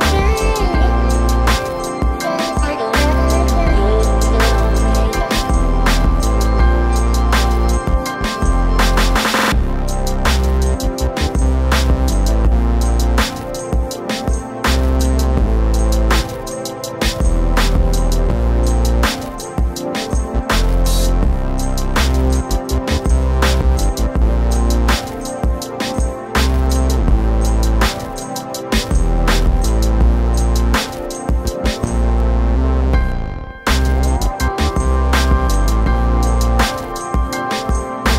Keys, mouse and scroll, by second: 4.4 click, 5.2 click, 8.4 click, 9.9 click, 11.0-11.7 typing, 13.9-16.4 typing, 14.2 click, 15.9 click, 16.7 right click, 17.0 click, 19.4 click, 21.4 click, 23.9 click, 23.9 click, 25.1 click, 25.1 click, 28.7 click, 29.9 typing, 31.1 click, 31.9 click, 35.0 click, 36.6 typing, 36.7 click, 38.0 right click.